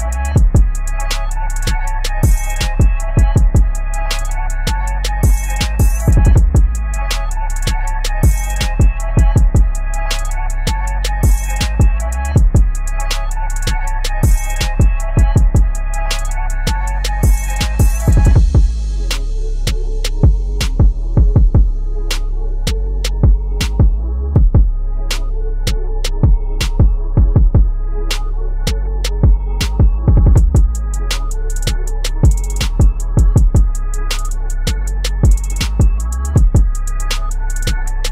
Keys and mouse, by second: 2.1 F7, 4.7 F7, 4.8 ctrl+click, 7.9 click, 12.1 click, 13.3 Tab, 15.3-18.1 drag, 18.1 shift+Tab, 18.9 Tab, 21.0 ctrl+a, 25.4 click, 25.5 click, 29.7 click, 30.5 Tab, 35.5 click, 36.4 ctrl+a, 36.8 click, 37.2 ctrl+d, 37.7 ctrl+t.